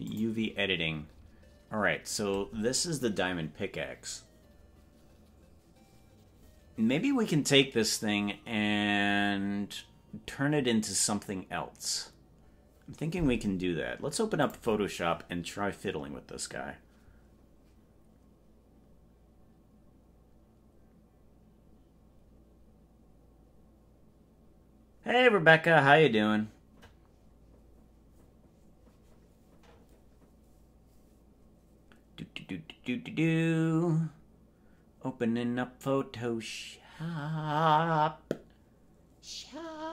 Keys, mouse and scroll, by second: 0.2 click, 1.2-1.8 scroll up 7.